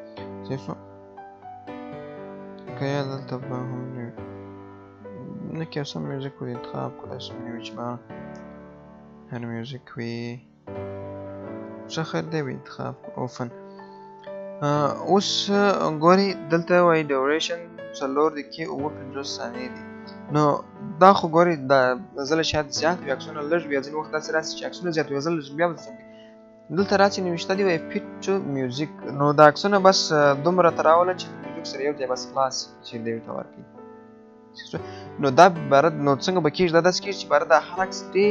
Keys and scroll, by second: 2.3 BackSpace, 6.6 BackSpace.